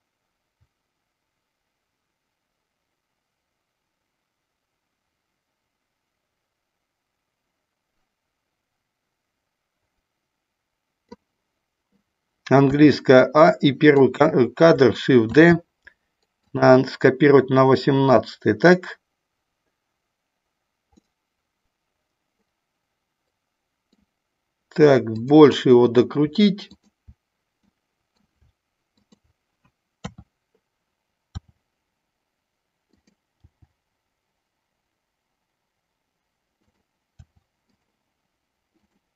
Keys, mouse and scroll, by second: 12.6 a, 13.3 click, 15.3 shift+d, 16.4 click, 20.9-24.0 middle drag, 25.2 click, 26.6 shift+click, 27.6 middle click, 28.9 shift+click, 29.9 KP_3, 31.3 r, 33.4 g, 37.1 r, 37.7 click.